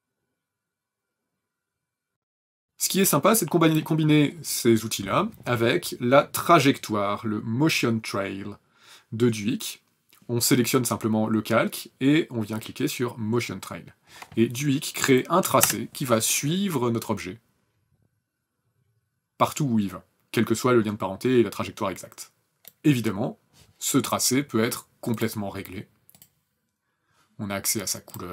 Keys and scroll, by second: 14.9 KP_0.